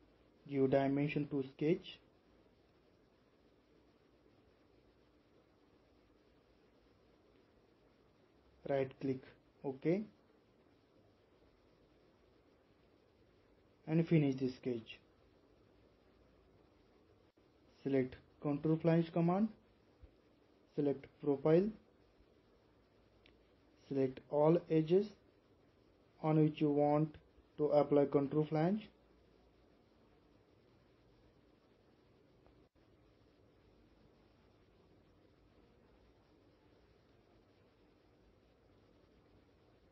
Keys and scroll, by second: 2.4-3.1 typing, 38.4-39.0 typing.